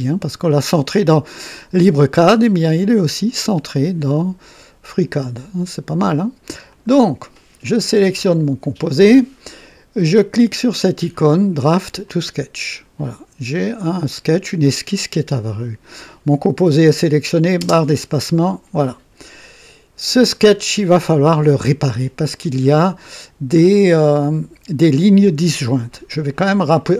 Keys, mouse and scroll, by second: 6.7 click, 12.0 click, 17.6 space, 20.4 click.